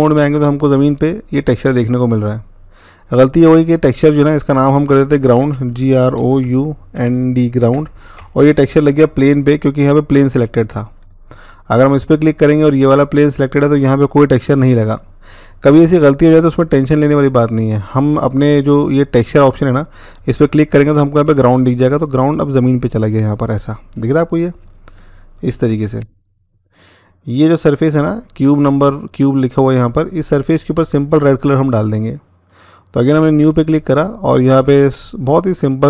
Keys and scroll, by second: 5.4-7.4 typing, 7.9 Return.